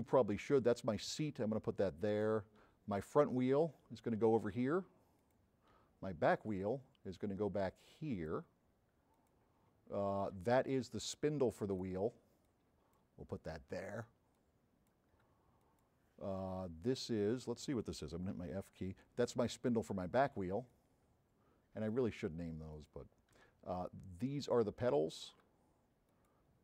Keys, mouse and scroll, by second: 2.2 click, 2.9 m, 3.1-5.5 drag, 6.4-8.5 drag, 6.4 m, 9.2 click, 10.8-11.8 drag, 10.8 m, 12.5 click, 13.5 click, 14.4 click, 15.7 click, 18.4 f, 20.8-22.1 drag, 20.8 m, 22.9 click, 23.7 m, 23.9-24.6 drag, 25.1 click, 26.2 click.